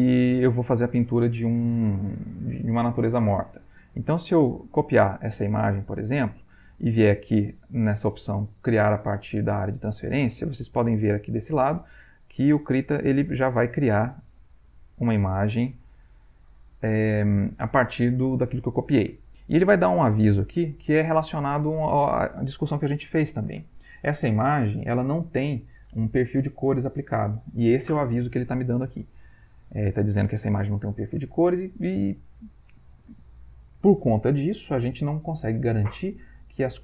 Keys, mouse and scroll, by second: 0.2 click, 3.7 right click, 4.5 click, 5.6 alt+Tab, 14.8 click, 19.8 click, 29.4 click.